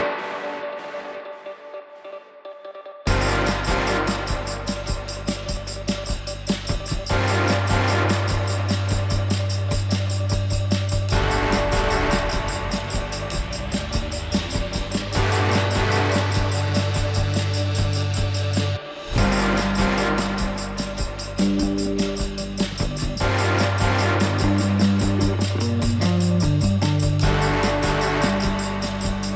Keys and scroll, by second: 21.9 alt+w.